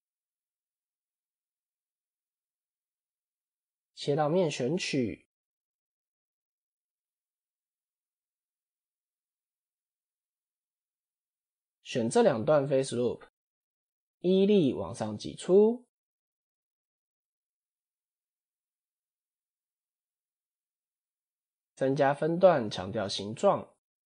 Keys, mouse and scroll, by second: 1.6 scroll down 4, 2.3 scroll up 1, 3.8 3, 5.3 alt+click, 6.6 alt+click, 7.9 alt+click, 8.6 KP_1, 9.7 KP_7, 11.1 alt+shift+click, 12.9 KP_1, 14.5 e, 16.1-17.7 middle drag, 18.1 KP_7, 19.1 click, 19.8 1, 20.0 middle click, 20.5 scroll up 2, 21.8 ctrl+r, 23.5 middle click.